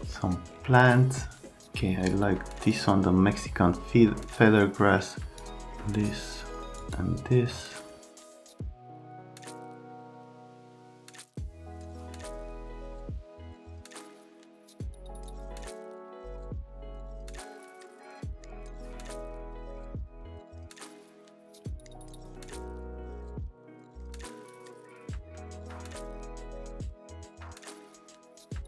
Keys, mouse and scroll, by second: 6.8 middle click, 8.0 click, 8.2 click, 8.4 click, 8.5 right click, 8.7 click, 8.8 middle click, 9.2 click, 9.7 alt+middle click, 9.9 alt+middle click, 10.3 F3, 11.2-12.0 typing, 11.8 middle click, 12.0 click, 12.2 right click, 12.5 click, 12.6 click, 12.9 right click, 13.0 click, 13.4 click, 14.3 click, 14.5 shift+click, 15.3 click, 15.5 click, 15.7 right click, 16.1 click, 16.3 right click, 16.4 click, 16.8 shift+click, 17.3 click, 17.6 click, 17.8 click, 18.0 middle click, 18.3 F3, 18.6 right click, 18.8 click, 19.1 click, 19.2 right click, 19.8 click, 20.0 right click, 20.2 click, 20.3 r, 20.5 F3, 20.6 middle click, 20.7 shift+click, 21.3-22.1 typing, 21.4 click, 22.0 click, 22.6 click, 22.9 click, 23.1 shift+click, 23.7 click, 23.8 middle click, 25.6 click, 25.8 shift+click, 26.3 click, 26.4 right click, 26.6 shift+click, 27.0 click, 27.1 right click, 27.2 click, 27.5 click, 27.7 right click, 27.9 click, 28.1 right click, 28.2 shift+click.